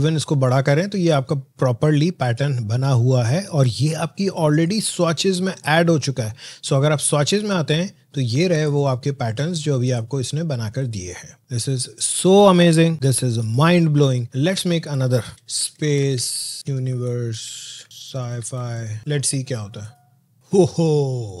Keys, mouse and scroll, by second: 0.1-15.3 drag, 15.1-19.0 typing, 19.7 click, 21.2 click.